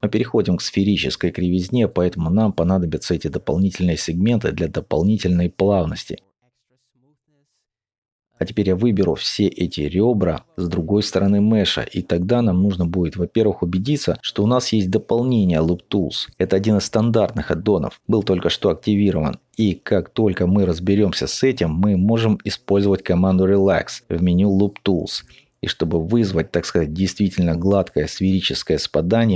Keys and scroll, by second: 7.5 alt+shift+2.